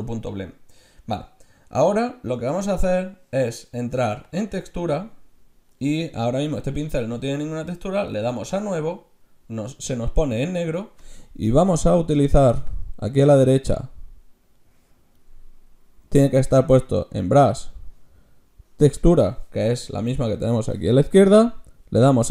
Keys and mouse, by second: 4.3-5.5 drag, 5.1-8.5 middle drag, 8.5-12.5 drag, 12.7-14.5 middle drag, 14.5 right click, 14.7 click, 14.8 right click, 14.9-17.9 drag.